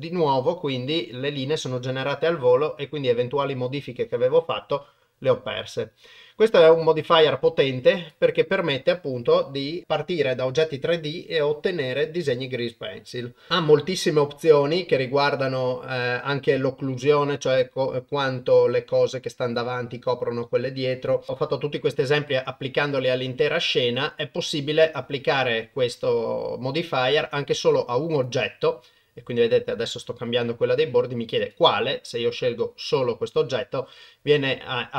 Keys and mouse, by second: 5.6-8.1 drag, 15.9 click, 19.4 click, 20.9 click, 24.1-28.4 drag.